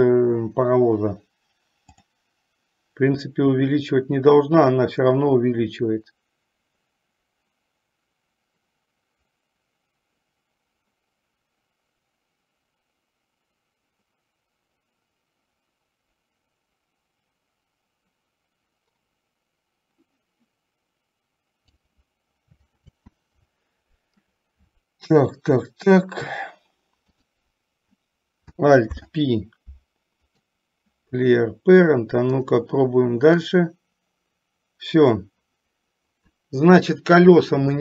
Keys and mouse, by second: 3.3 click, 3.6-22.2 drag, 23.0 ctrl+z, 29.1 alt+p, 32.5 click, 33.6-37.8 drag.